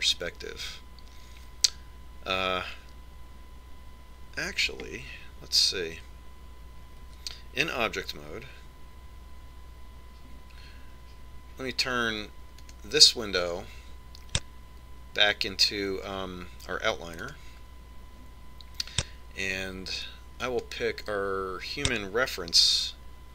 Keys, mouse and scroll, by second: 8.7 Tab, 14.3 click, 21.8 click.